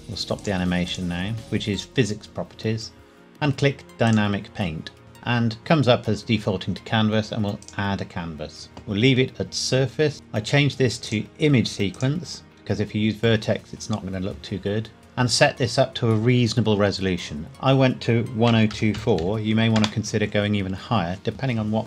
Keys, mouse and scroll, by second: 0.4 click, 4.0 click, 7.6 click, 11.0 click, 17.5 click, 18.4 KP_1, 18.7 KP_0, 19.0 KP_2, 19.2 KP_4, 19.8 KP_Enter.